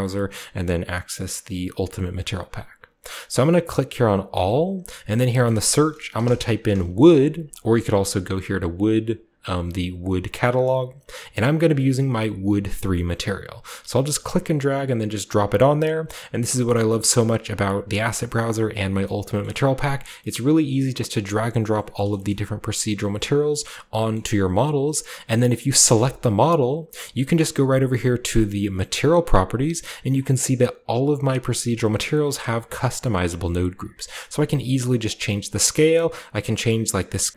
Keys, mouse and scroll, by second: 3.0 click, 4.3 click, 5.3 click, 6.1-6.7 typing, 7.5 click, 7.8-9.5 scroll down 2, 13.9-14.9 drag, 15.5-16.5 scroll down 2, 16.0-18.8 middle drag, 17.2-18.0 scroll up 2, 18.0-18.8 scroll up 1, 18.8 scroll up 1, 19.4-20.1 middle drag, 20.3-21.7 middle drag, 21.9 shift+middle drag, 22.2-23.7 shift+scroll up 2, 22.3-25.9 shift+middle drag, 23.7 shift+scroll down 2, 25.9 right click, 28.3 drag, 29.1 click, 32.5 click, 33.7-35.1 drag, 35.7-37.3 drag.